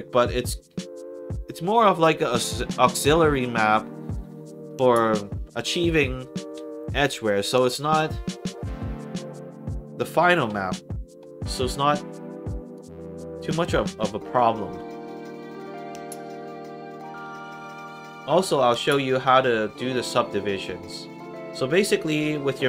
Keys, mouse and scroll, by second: 10.8 middle click, 12.4 click, 13.3 click, 14.8 scroll up 2, 15.6 middle click, 19.6 click.